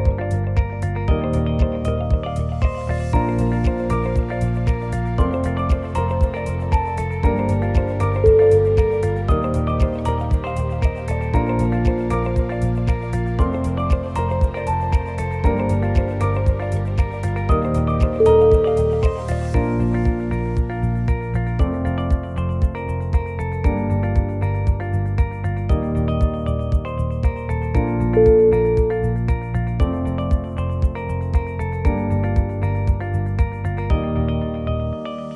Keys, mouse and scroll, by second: 2.0 g, 3.7 shift+click, 4.5 shift+click, 4.7 g, 6.2 click, 6.6 g, 7.6 click, 8.0 g, 8.9 shift+click, 9.5 e, 10.8 g, 11.8 g, 13.0 click, 13.4 shift+click, 14.1 e, 15.2 g, 16.7 click, 17.0 g, 18.1 g, 19.3 click, 19.7 g, 20.8 click, 21.2 g, 22.0 click, 22.4 g, 23.6 ctrl+r, 24.3 click, 24.6 g, 26.7 ctrl+r, 28.6 click, 28.9 g, 30.7 ctrl+z, 31.0 click, 31.7 g, 32.9 g, 34.0 click, 34.3 g.